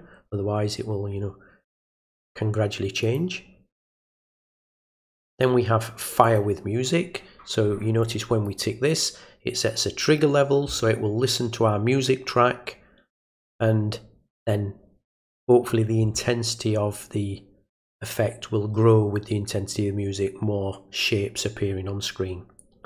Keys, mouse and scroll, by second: 3.0 click, 5.0 click, 6.2 click, 8.0 click.